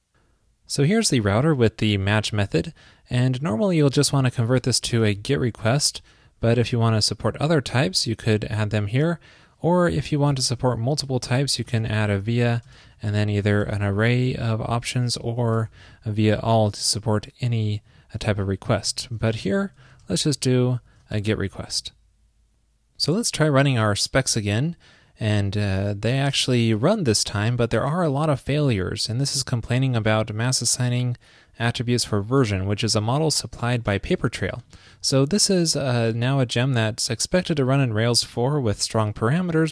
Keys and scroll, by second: 8.5 alt+shift+Left, 11.1 super+Right, 17.9 shift+super+Left, 18.9 alt+Right, 19.8 alt+shift+Right, 20.3 super+Right, 20.3 alt+shift+Left, 21.6 super+s.